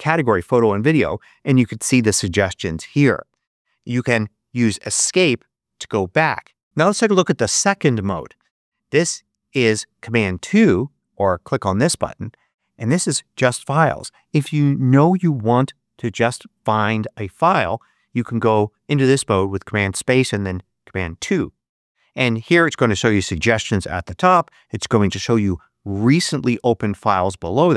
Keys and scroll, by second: 4.8 ⟲.